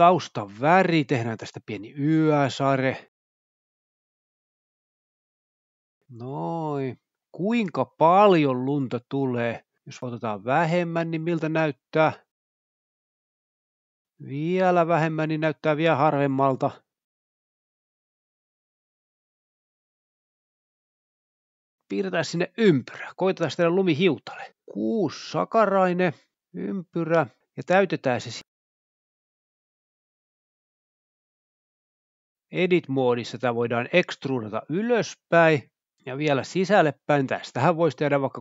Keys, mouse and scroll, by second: 0.0 space, 0.4 click, 1.5-1.9 drag, 2.1 click, 2.6 click, 3.3 click, 4.2 click, 4.7-5.3 drag, 6.3 click, 9.1 space, 9.8 click, 11.1 click, 12.5 click, 13.1 typing, 13.2 Return, 13.5 Tab, 14.3-15.8 typing, 14.8 click, 20.1 space, 21.2-21.6 drag, 24.1 click, 25.2 click, 25.8 a, 27.8 click, 28.0 click, 28.6 click, 28.9 click, 31.2 g, 31.8 click, 33.8 e, 34.0 z, 35.1 typing, 35.9 click, 37.5-38.2 typing.